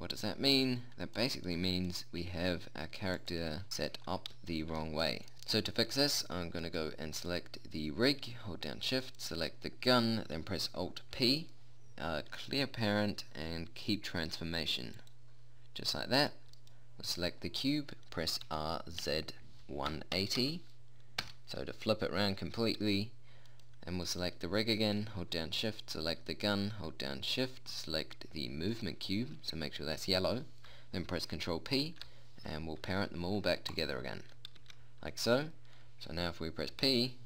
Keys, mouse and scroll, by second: 2.4-5.3 drag, 5.3 a, 11.7 alt+p, 16.5-18.9 right drag, 18.9 r, 24.0-31.1 right drag, 32.4 ctrl+p, 35.1 a.